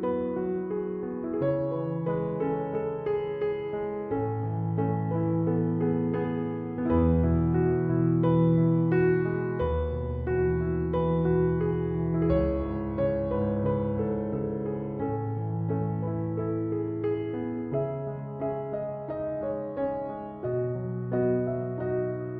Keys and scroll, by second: 0.3 Return, 1.8 Escape, 9.6 Escape.